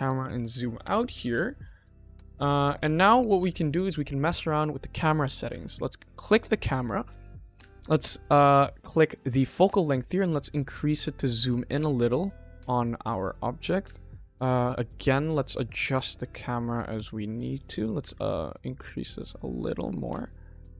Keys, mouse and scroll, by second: 0.7 n, 1.0 n, 1.6 click, 1.9 click, 2.1 n, 2.3 click, 2.7 ctrl+s, 4.6 click, 6.3 click, 9.9-12.9 drag, 13.4 click, 14.9 n, 15.4 click, 15.9-17.2 shift+middle drag, 18.0-20.1 drag.